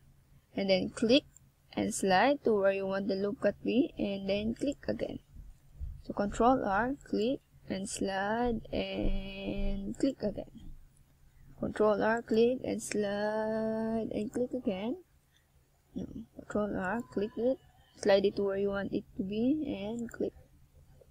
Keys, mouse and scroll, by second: 0.6 middle click, 2.1 middle click, 3.4 middle click, 9.7 middle click, 11.4 middle click, 12.2-13.0 shift+scroll up 2, 13.0 middle click, 14.7 click, 15.2 click, 16.5 o, 17.7 click, 19.9 click.